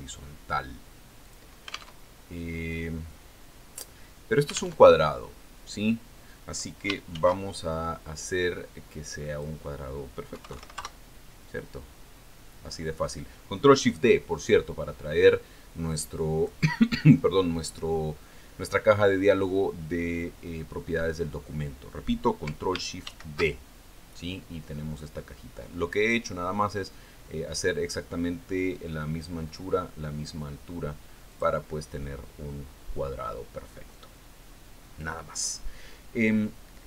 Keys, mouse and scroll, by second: 1.1 click, 2.8 click, 3.5 alt+Tab, 6.3 alt+Tab, 8.6 ctrl+shift+d, 10.7 click, 11.9 KP_2, 12.0 KP_9, 12.3 KP_Enter, 16.6-18.1 drag, 24.6 ctrl+shift+d, 32.8 click.